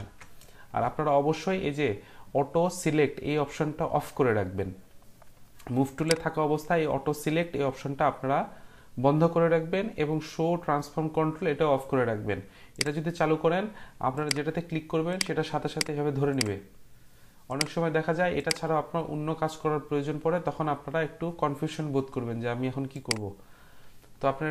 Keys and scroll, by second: 0.0 ctrl+z.